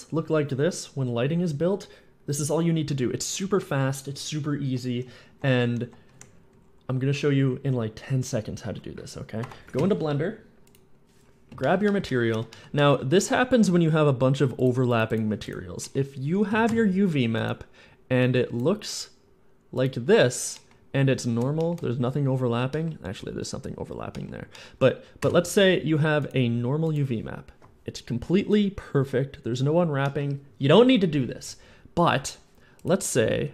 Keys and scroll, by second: 3.2-7.3 typing, 8.5 s, 9.5 Escape, 12.1 Tab, 16.3 a, 16.5 a, 16.8 a, 25.0 u, 25.3 u, 33.0 g, 33.4 g.